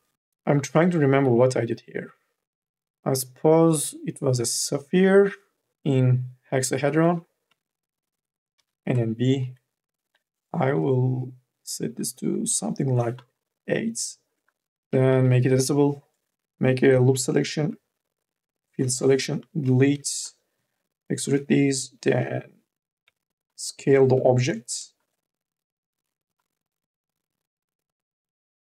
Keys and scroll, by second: 7.3 t, 8.4 n, 8.8 b, 9.2 e, 12.0 KP_8, 14.5 r, 14.9 c, 15.2 2, 17.2-19.8 typing, 19.1 Delete, 22.0 r, 22.9 t, 24.1 ctrl+z, 24.3 4, 25.8 e, 28.5 t.